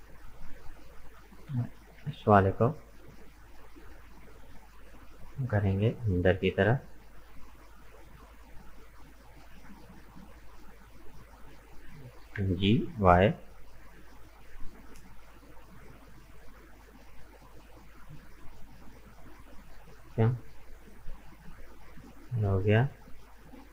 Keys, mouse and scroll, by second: 0.8 right click, 1.1 middle click, 2.0 g, 12.3 g, 20.2-21.3 middle drag, 21.3-21.6 scroll up 2, 21.6-23.7 middle drag.